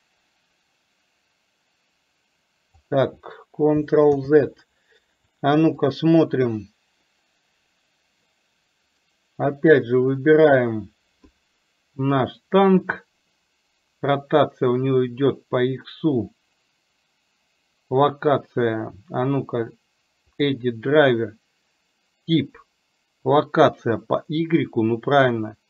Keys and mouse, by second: 4.2 ctrl+z, 5.9 click.